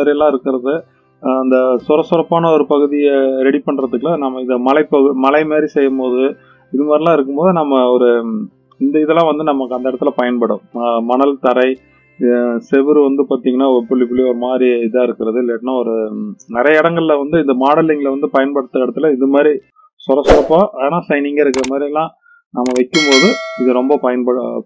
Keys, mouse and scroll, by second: 2.7-3.6 middle drag, 6.4-7.2 middle drag.